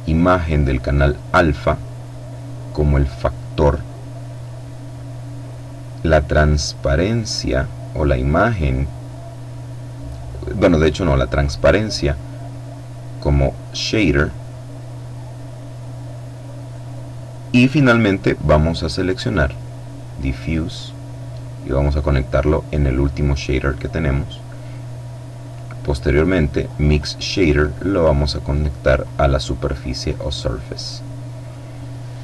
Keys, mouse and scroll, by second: 0.9-4.2 drag, 6.1-11.6 drag, 13.0-14.0 drag, 14.8-17.5 middle drag, 17.7-18.8 drag, 19.5-22.2 drag, 23.4-25.3 middle drag, 26.3-28.4 drag, 30.0-31.3 middle drag.